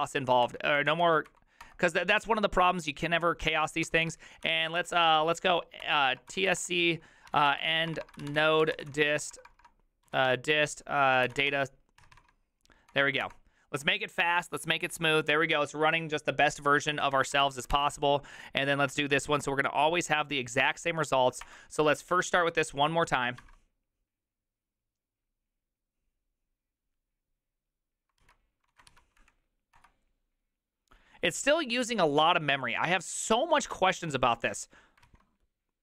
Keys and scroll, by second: 0.0 Up, 0.4 Up, 1.3 Up, 1.3 Down, 1.6 Return, 3.8 ctrl+c, 4.1 ctrl+c, 4.2-12.5 typing, 12.9 Return, 13.2 Return, 17.2 ctrl+a, 17.2 3, 17.5 ctrl+c, 17.6 ctrl+c, 20.1 Up, 21.5 Return, 23.5 alt++, 28.7 alt+{, 28.7 ctrl+a, 28.9 4, 29.2 Up, 29.8 Return.